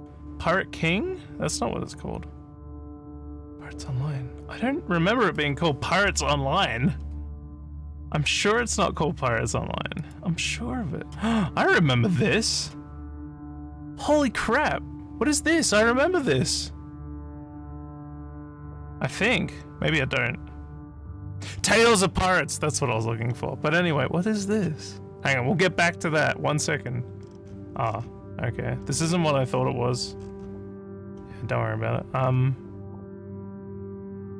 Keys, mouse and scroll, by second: 7.0 scroll down 1, 7.6 scroll down 1, 10.0 click, 11.4 scroll down 1, 12.1 scroll down 1, 12.6 click, 23.3 middle click, 24.5 click, 27.2 scroll up 1, 27.9 scroll up 2, 28.8 scroll up 1, 29.5 scroll up 1, 30.2 scroll up 3, 31.1 scroll down 1, 32.2 scroll down 1, 32.3 scroll, 33.2 scroll, 33.8 scroll.